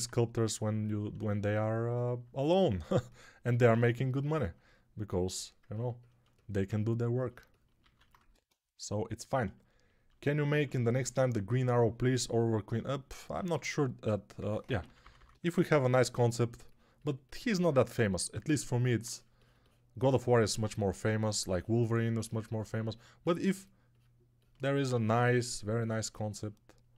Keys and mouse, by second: 7.7 alt+q, 8.1 1, 13.3-15.3 typing, 24.8 1.